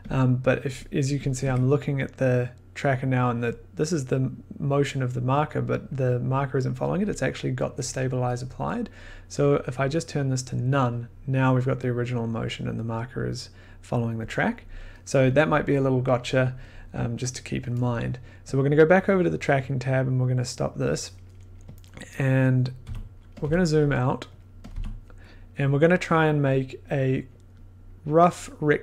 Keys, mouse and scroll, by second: 1.3 click, 1.4 1, 9.8 click, 10.3 click, 18.5-20.0 drag, 20.6 click, 22.1-22.6 scroll, 22.8 f, 23.4 click, 24.3 click, 24.6 click, 24.7 f, 26.5 click, 27.4 click, 28.3 click.